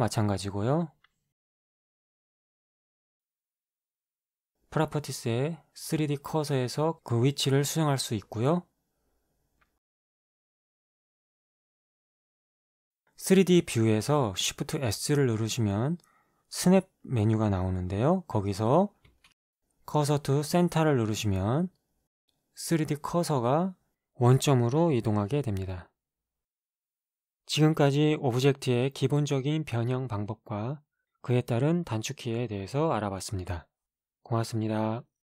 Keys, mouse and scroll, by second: 2.1 right click, 4.9-6.0 scroll down 2, 6.0-6.8 scroll down 1, 6.8-8.7 middle drag, 9.0-10.6 drag, 10.6 KP_0, 11.2 Return, 13.0-15.1 drag, 15.7 shift+s, 20.8-35.2 drag.